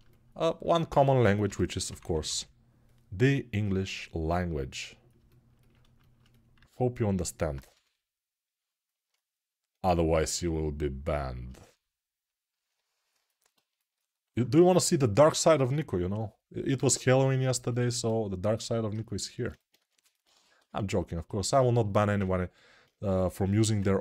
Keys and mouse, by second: 1.2 g, 1.7 ], 6.9-13.2 alt+right drag, 7.5 g, 13.2-24.0 ctrl+alt+drag, 19.5 2, 20.3 1, 23.3 g.